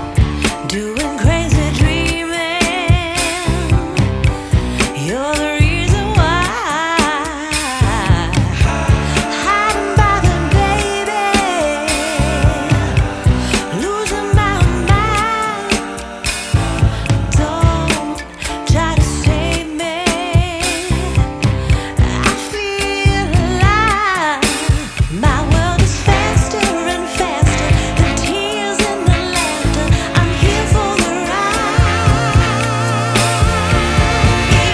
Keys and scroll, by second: 7.6 Up, 16.6 Return, 17.3 super+Return, 30.0 Return.